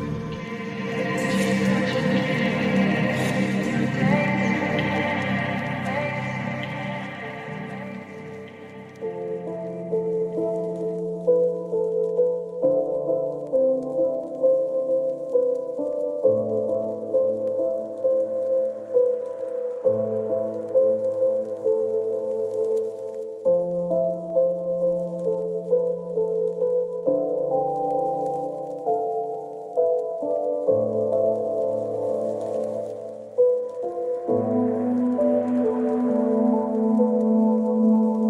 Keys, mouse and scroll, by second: 5.9 click, 10.5-12.3 drag, 13.0 click, 15.6 click, 16.6 click, 18.8 click, 20.0 click, 22.0 click, 25.6 click, 30.1 click, 31.1-32.5 scroll up 1, 34.8 click.